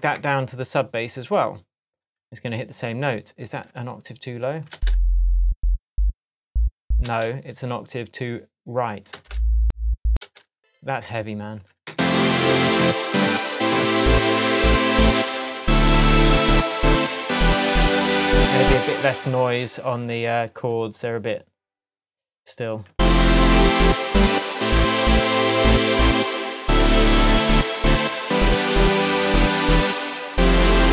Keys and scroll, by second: 4.7 space, 7.0 space, 9.1 space, 11.2 space, 11.9 space, 18.6 space, 22.9 space, 26.5 super+z.